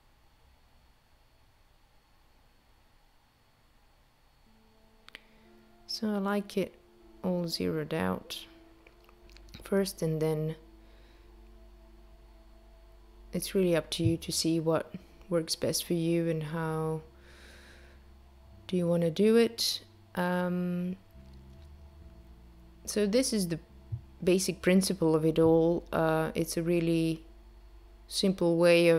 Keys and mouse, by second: 0.2 click, 4.6 click, 10.1 click, 10.9 click, 17.7 click, 25.9 space.